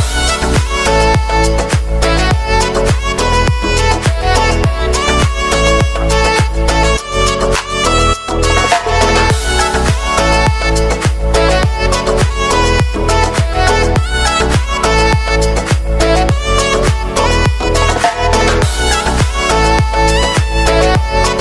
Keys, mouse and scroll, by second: 0.2 s, 3.2 ctrl+r, 6.0 ctrl+r, 8.1 Tab, 8.2-8.6 scroll down 2, 8.6 KP_7, 9.4 shift+middle click, 10.0-10.4 scroll up 4, 10.4-10.8 shift+middle drag, 10.8 Tab, 12.0 click, 13.4-14.4 drag, 15.9 click, 16.8 f, 17.7 g, 18.9 g.